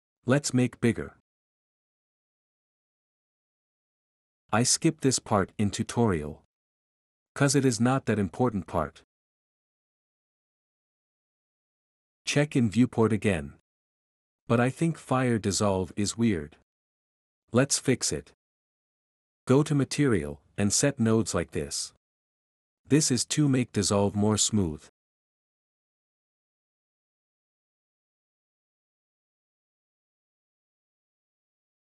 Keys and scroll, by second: 0.0-0.5 typing, 7.2-14.4 typing, 16.8-17.6 typing, 19.0 Escape, 19.0 w, 19.7 m, 27.0 m, 27.4 m, 29.8 2.